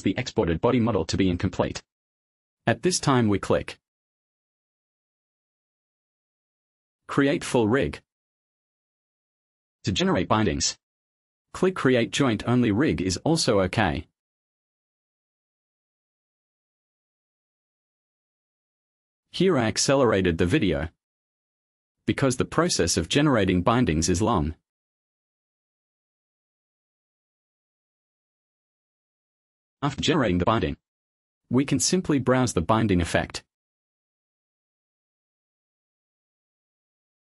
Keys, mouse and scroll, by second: 2.8-3.3 scroll up 1, 16.6 click, 31.5 click.